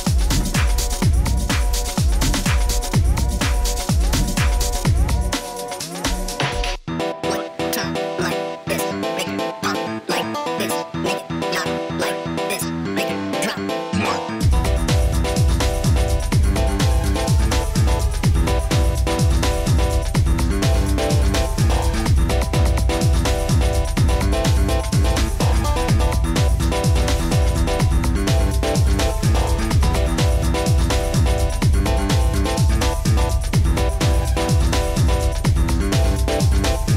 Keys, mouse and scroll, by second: 0.1 middle click, 0.5 middle click, 3.6 middle click, 3.8-5.1 scroll, 5.1-7.1 scroll, 7.7 click, 9.3-9.7 scroll, 12.1 click, 14.6 click, 17.2 click, 18.5 click, 19.9-22.9 typing, 20.9 click, 21.2 click, 22.1 click, 22.5 click, 22.8 click, 23.0 click, 26.3 click, 26.6 middle click, 28.2 click, 29.2 middle click, 29.3 middle click, 29.4 middle click, 32.4 click, 33.4 click, 36.6 click.